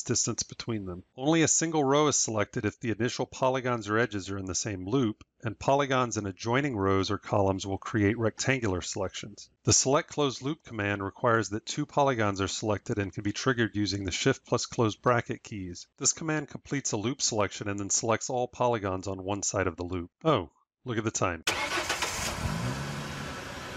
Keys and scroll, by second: 14.0 shift+].